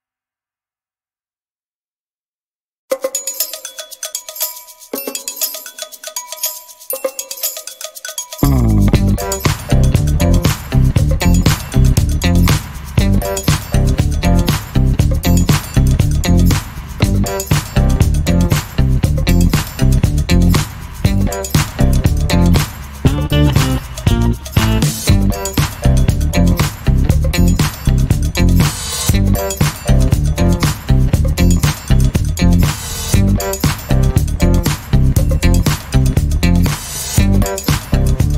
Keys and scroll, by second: 21.2 n, 25.6 alt+a, 37.7 Escape.